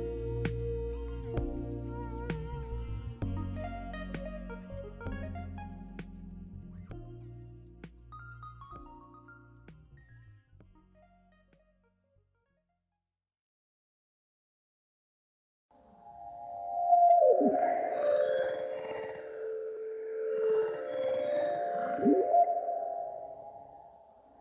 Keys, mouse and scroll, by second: 1.3 scroll down 2, 1.5-4.2 shift+middle drag, 2.8 scroll down 2, 3.0 Tab, 4.2 click, 7.1 click, 7.4-8.9 middle drag, 8.9 click, 9.2 scroll up 1, 9.4-14.0 middle drag, 9.7 Tab, 10.5 scroll up 1, 14.0 ctrl+r, 15.9 click, 16.0 middle click, 16.9 Tab, 18.3 Tab, 18.4 middle click, 18.7 Tab, 19.0 middle click, 20.8 right click, 20.9 middle click, 23.7-24.2 scroll up 1.